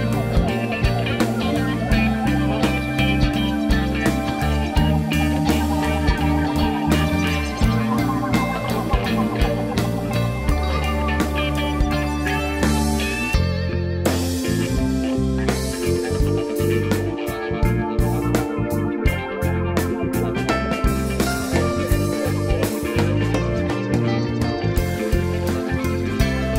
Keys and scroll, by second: 11.3 space.